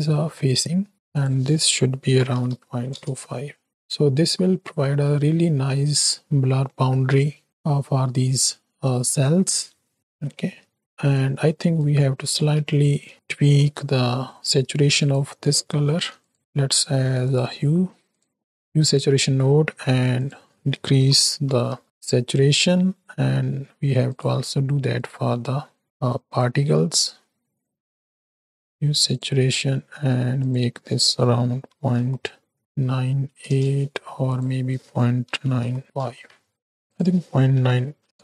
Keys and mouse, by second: 0.4-0.9 middle drag, 1.1-2.9 drag, 3.7 middle click, 6.7-7.4 middle drag, 7.8 middle click, 9.6-9.9 middle drag, 9.9 space, 11.1 click, 11.1 space, 11.7 click, 12.8 shift+click, 13.4 g, 15.8 shift+a, 18.8 click, 20.2-21.8 drag, 24.2-25.3 drag, 26.4 middle click, 27.7 middle click, 27.8 shift+a, 30.5-33.4 drag, 34.3-35.8 drag, 36.9-38.2 drag.